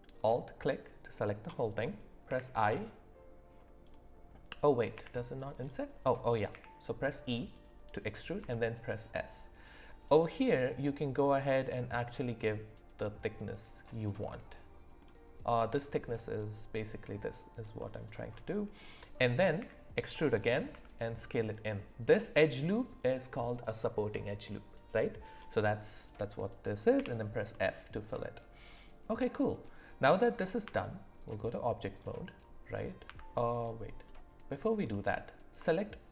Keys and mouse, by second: 0.1 alt+click, 4.9 g, 6.5 e, 8.4 s, 14.2 middle click, 17.8 middle click, 19.6 e, 20.7 s, 27.5-29.0 middle drag, 30.6 Tab, 31.9 click, 33.0 Tab, 34.9 middle click.